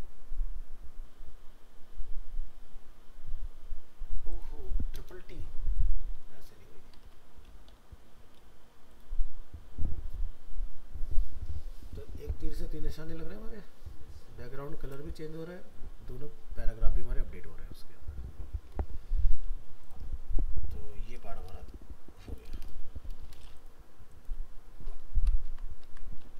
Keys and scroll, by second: 6.3 ctrl+s, 7.1 alt+Tab, 25.5 ctrl+s, 25.8 alt+Tab.